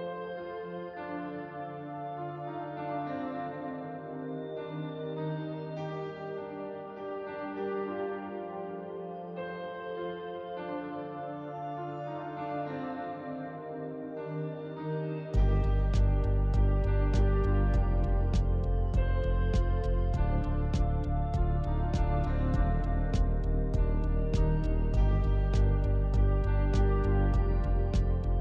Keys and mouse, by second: 0.6 KP_Decimal, 2.8 shift+middle click, 6.2 alt+z, 6.6 middle click, 7.2 alt+z, 8.0 middle click, 10.1 click, 12.2 o, 15.8 click, 16.5 Tab, 17.3 click, 18.0 ctrl+z, 19.4 s, 21.6 o, 26.5 middle click.